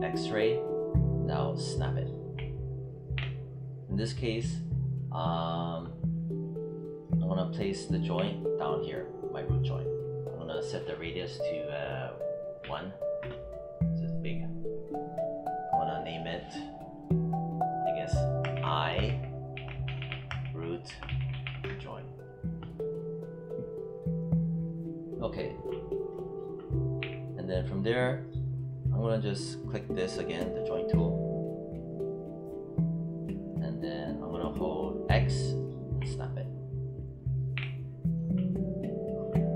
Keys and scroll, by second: 13.5 Return, 18.4 shift+i, 26.9 w.